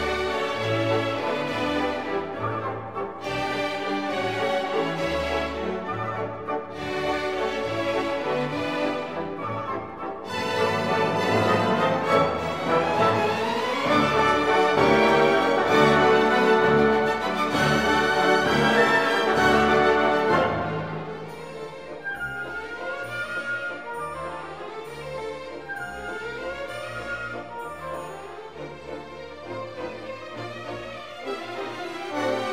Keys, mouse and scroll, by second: 0.0 Right, 2.5-7.6 drag, 7.6 Right, 14.4-16.3 drag, 17.9 click, 18.4 shift+space, 20.9 shift+space, 21.4-27.8 drag, 27.8 shift+space, 31.3 Right, 31.9 Right, 32.0 Right.